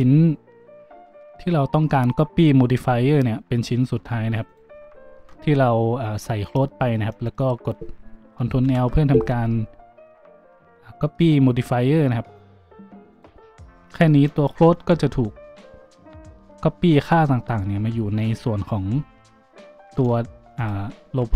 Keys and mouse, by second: 4.5 shift+middle click, 8.6 ctrl+l, 13.1 middle click, 17.3-21.3 drag, 20.4 z, 21.2 z.